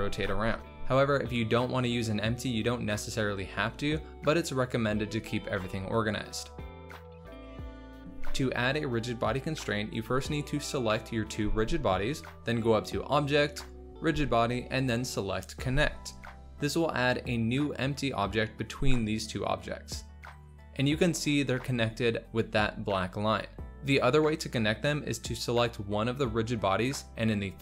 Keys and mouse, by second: 1.2 space, 4.1 g, 4.1 y, 4.5 space, 10.0 shift+click, 12.0-16.3 drag, 20.6 g, 20.6 z, 21.2 click, 25.3 click, 27.2 click.